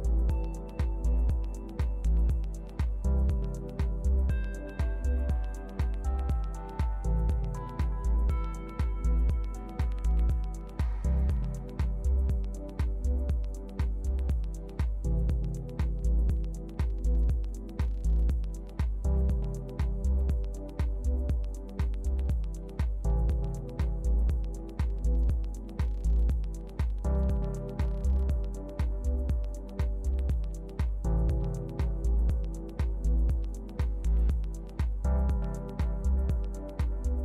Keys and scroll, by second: 2.2 shift+Left, 3.7 shift+Right, 24.4 super+d, 25.3 super+Return.